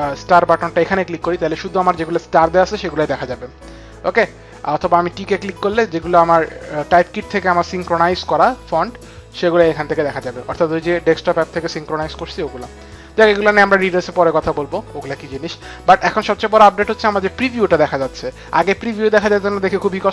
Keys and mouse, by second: 4.5 click, 10.3 click, 13.4 click, 17.6 click, 18.5 click.